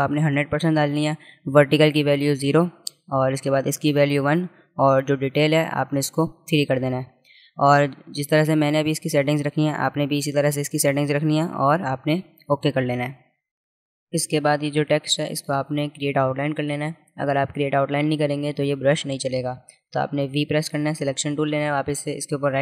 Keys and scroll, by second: 20.0 v.